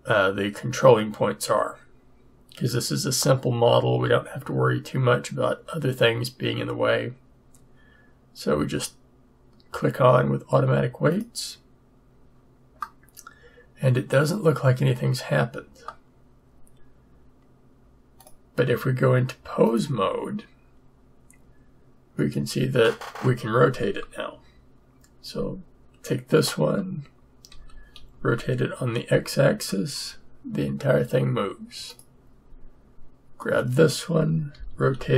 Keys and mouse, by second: 18.2 click, 19.7 click, 27.5 r, 34.5-35.1 drag, 34.5 r.